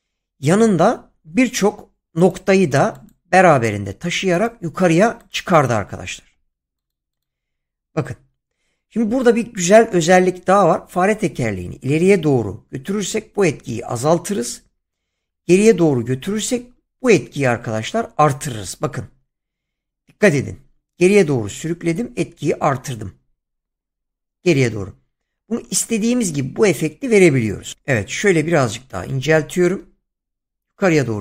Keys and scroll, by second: 7.2 <.